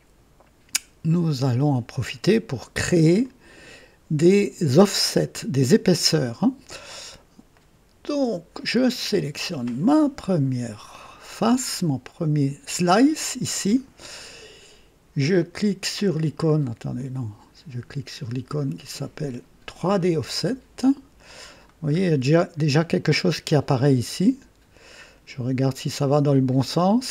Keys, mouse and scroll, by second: 3.2-6.6 drag, 6.9-7.3 scroll up 2, 7.5 right click, 9.0 click, 11.2 scroll up 2, 15.2 click, 16.9 click, 18.8 click, 19.9 click, 21.1 right click, 21.8 scroll up 1, 22.6 right click, 23.8-27.1 drag.